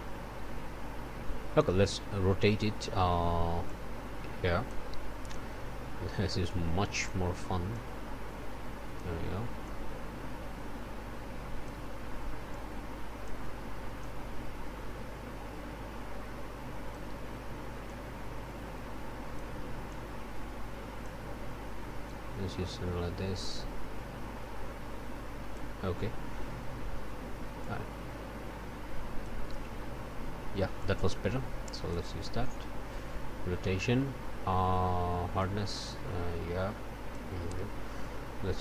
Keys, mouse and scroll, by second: 3.6-4.9 drag, 6.5 click, 7.7-9.2 drag, 9.6-11.8 drag, 12.5 click, 14.0-17.1 drag, 17.8-19.6 drag, 19.9-21.2 drag, 22.0-25.8 drag, 27.6-29.4 drag, 30.8-32.1 drag, 35.4-37.3 drag.